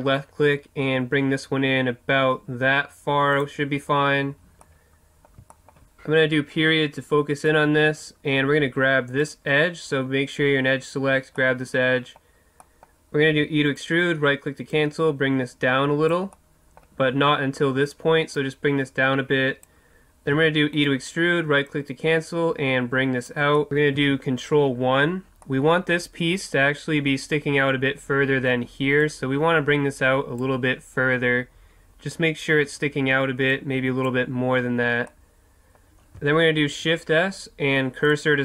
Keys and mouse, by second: 3.4-5.1 drag, 4.9 middle click, 5.1 middle click, 5.6 middle click, 6.3 KP_Decimal, 9.2-11.4 right drag, 11.4-13.8 middle drag, 13.3 e, 13.8 right click, 16.1 click, 16.6-18.4 middle drag, 18.4-20.3 drag, 20.3 e, 20.8 click, 21.7-23.3 right drag, 23.7 KP_3, 24.0 ctrl+KP_1, 25.4-29.1 middle drag, 29.1-35.3 drag, 35.3-36.6 middle drag, 36.6 shift+s.